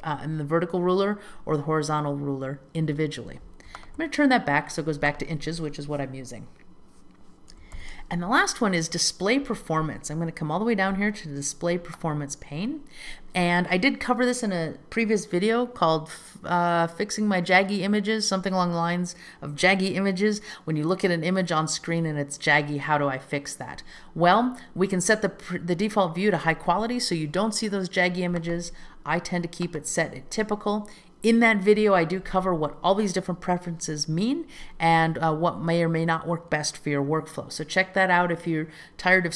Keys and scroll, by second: 7.9 super+k.